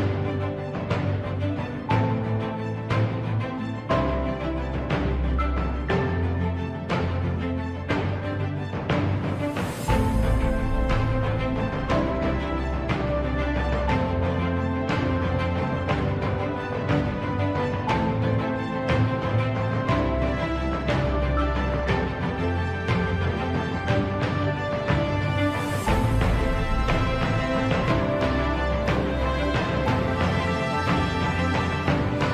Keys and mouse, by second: 1.0 ctrl+click, 2.4 middle click, 3.5 middle click, 6.0 click, 7.1 KP_1, 8.4 e, 13.7 ctrl+z, 16.4 e, 21.6 g, 28.9 shift+middle click, 30.1 KP_1, 30.7 shift+middle click.